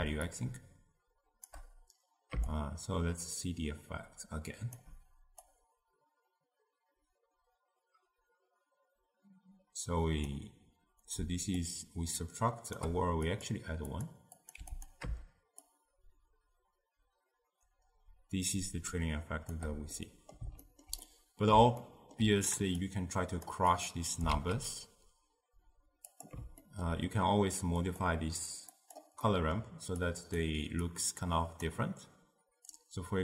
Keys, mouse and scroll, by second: 0.3-8.5 shift+drag, 11.6-14.9 shift+drag, 15.7-18.7 shift+drag, 20.0-22.9 middle drag, 22.9 click, 24.4 shift+d, 26.6-27.9 ctrl+middle drag, 27.9-29.3 drag, 29.3 middle click, 30.1 click, 30.9 click, 32.8-33.2 drag.